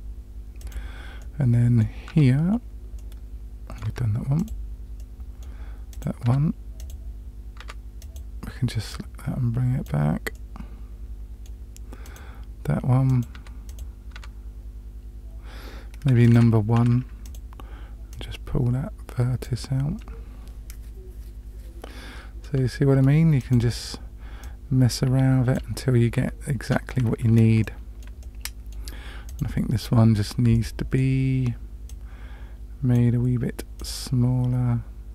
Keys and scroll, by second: 2.1 Tab, 3.9 Tab, 6.3 Tab, 7.6 Tab, 13.4 Tab, 14.1 Tab, 16.3 1, 16.8 1, 26.6 Tab.